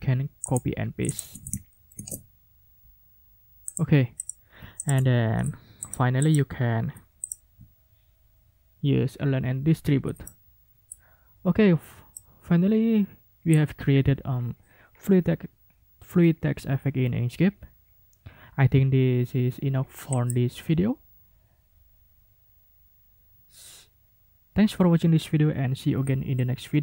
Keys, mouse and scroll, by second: 0.4 click, 1.1 ctrl+click, 1.2 ctrl+a, 1.9 ctrl+v, 3.7 click, 5.2 ctrl+shift+a, 7.2 click, 7.7-8.1 ctrl+scroll up 4, 8.2 ctrl+scroll down 2, 8.4-8.9 ctrl+scroll up 4, 9.4 ctrl+scroll up 2, 10.2 ctrl+middle click, 12.1-13.7 middle drag, 20.1 click.